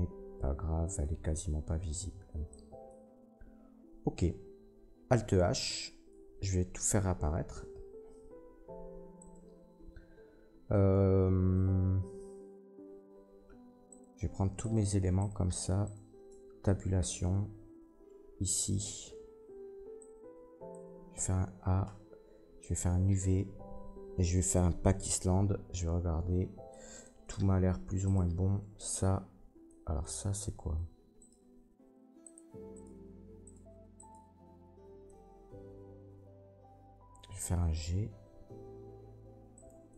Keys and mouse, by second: 5.2 alt+h, 6.1 Tab, 7.9 alt+h, 9.2 middle click, 9.2 right click, 13.9 shift+middle click, 14.0-14.6 shift+drag, 14.6 shift+middle click, 14.7-15.2 shift+drag, 15.2 shift+middle click, 15.2-15.8 shift+drag, 15.8 shift+middle click, 15.9-28.0 shift+drag, 16.3 Tab, 21.1 a, 28.0 middle click, 28.1-31.2 drag, 31.2 middle click, 31.4-32.7 drag, 32.7 middle click, 32.8-33.4 drag, 33.4 shift+middle click, 33.5-33.9 shift+drag, 33.9 shift+middle click, 34.2-35.4 shift+drag, 35.5-39.9 drag, 38.3 g.